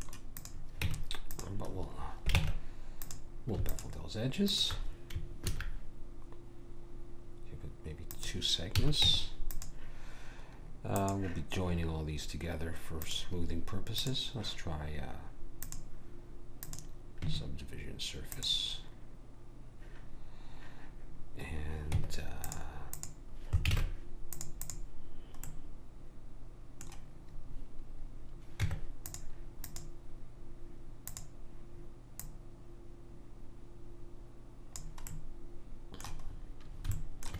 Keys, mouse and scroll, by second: 0.8 Tab, 1.4 click, 2.4 ctrl+Tab, 3.7 click, 5.4 ctrl+b, 8.8 a, 9.1 Tab, 10.9 click, 21.9 Tab, 22.9-26.5 drag, 23.7 ctrl+Tab, 25.6 right click, 28.6 Tab, 29.6-34.1 drag, 35.1 middle click.